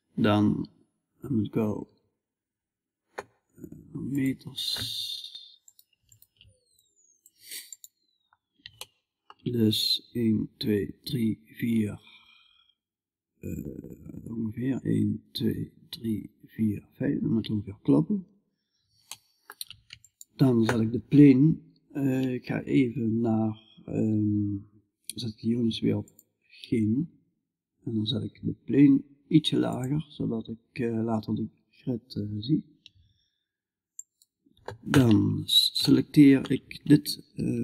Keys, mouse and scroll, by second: 1.3 s, 2.6 middle click, 2.8 middle click, 6.2-7.9 middle drag, 17.1-35.3 middle drag, 35.4-37.6 middle drag.